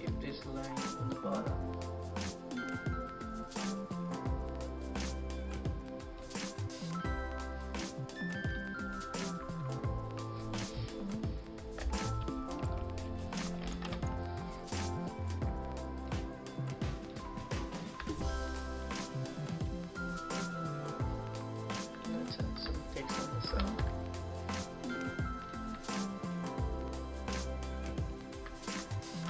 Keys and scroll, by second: 11.9 ctrl+-, 13.3 ctrl+=, 15.3 ctrl+z, 23.5 ctrl+v.